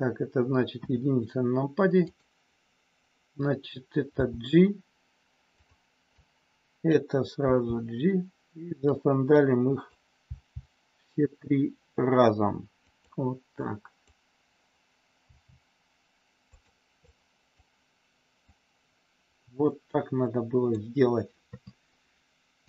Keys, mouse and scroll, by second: 0.8 KP_1, 2.0 click, 4.2 g, 5.5 click, 6.3 click, 7.5 g, 9.4 click, 12.8 click, 13.7 click, 15.2 g, 16.4 click, 17.2 click, 18.4-20.8 drag, 21.5 KP_3.